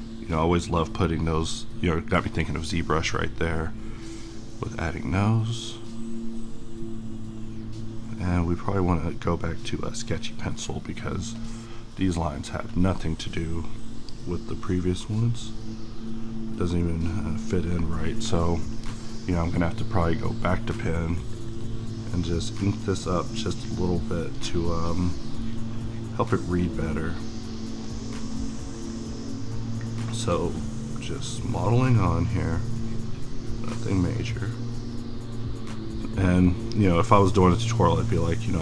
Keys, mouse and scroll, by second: 38.2 click.